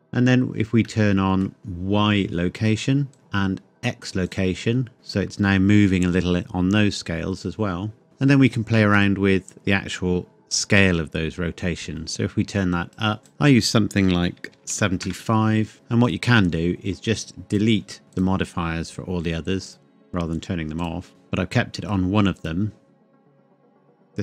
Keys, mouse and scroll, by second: 0.8 middle click, 3.1 click, 4.3 click, 4.9 middle click, 8.0 click, 8.9 click, 14.5 KP_7, 15.0 KP_Enter, 15.7 click.